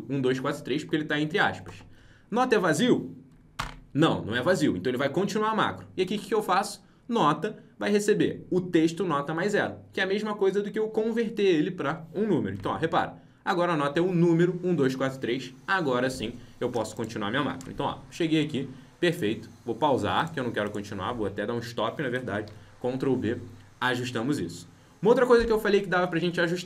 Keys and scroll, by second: 3.5 F8, 12.5 F8, 22.4 ctrl+b.